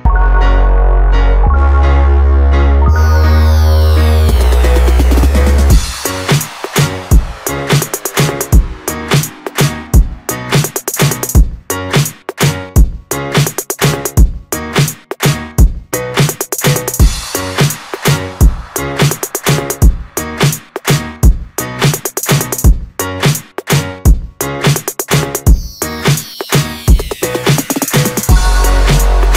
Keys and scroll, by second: 4.7 Return, 13.8 ctrl+shift+e.